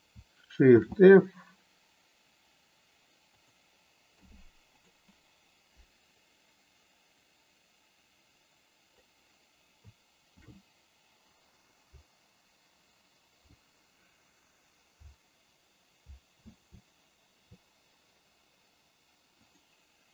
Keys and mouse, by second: 0.7 shift+f, 3.3 click, 4.0 i, 6.3-8.9 drag, 10.3 shift+f, 11.9-12.9 Up, 15.0 Down, 15.9 Left, 16.7 Left, 19.4 click.